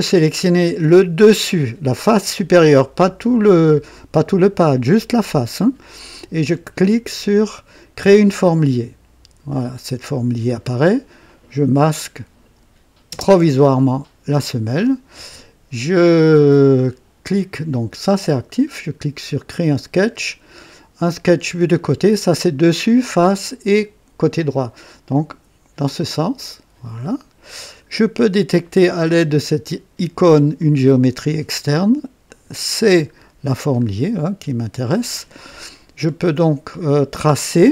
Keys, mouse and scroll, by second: 2.2 click, 8.0 click, 9.5 click, 11.2 click, 13.1 space, 19.6 click, 25.1 click, 26.0 click, 27.0 right click, 30.6 click, 32.3 click, 33.1-33.7 scroll up 3, 34.0 right click, 36.0 scroll down 2, 36.5 right click.